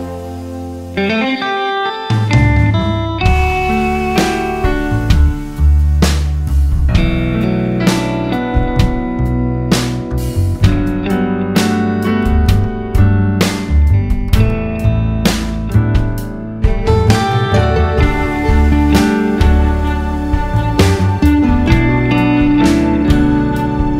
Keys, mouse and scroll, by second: 0.6-2.1 scroll up 1, 2.1-3.1 scroll up 1, 3.8 click, 4.2 scroll down 1, 4.8 click, 7.0-7.5 scroll down 2, 7.2 click, 8.2 scroll down 1, 8.4 a, 10.4 click, 12.2-13.1 scroll up 1, 17.0 scroll down 1, 18.4 click, 22.8 click, 23.3 scroll up 1.